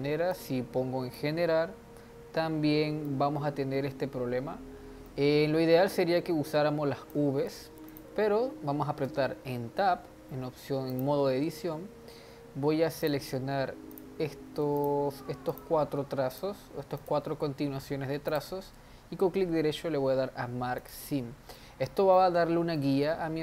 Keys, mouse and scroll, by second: 0.3 drag, 3.0-6.1 middle drag, 6.5 click, 7.9 click, 9.1 Tab, 10.9 click, 11.5-13.0 scroll up 2, 13.0-14.0 drag, 14.8 alt+click, 15.5 alt+shift+click, 16.3 alt+shift+click, 16.9 alt+shift+click, 18.3-21.5 right drag, 21.5-23.1 middle drag, 23.1-23.4 scroll down 2.